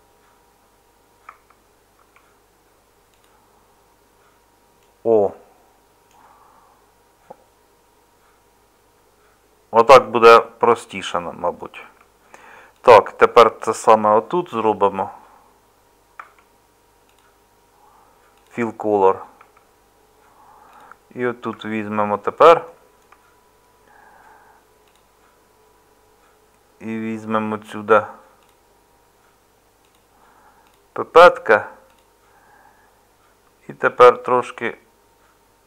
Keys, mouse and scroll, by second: 1.3 Tab, 2.0 Tab, 11.8 Tab, 16.2 Tab, 19.4 Tab, 21.5 Tab.